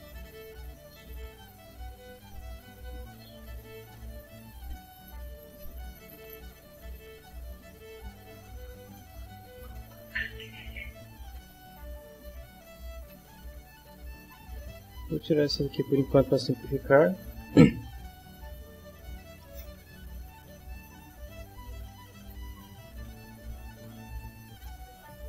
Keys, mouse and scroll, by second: 0.4 middle click, 1.8-3.6 drag, 5.2-13.8 middle drag, 15.0 click, 16.6 click, 19.5 shift+middle click, 21.4 ctrl+middle click, 23.0 click, 24.7-25.2 ctrl+middle drag.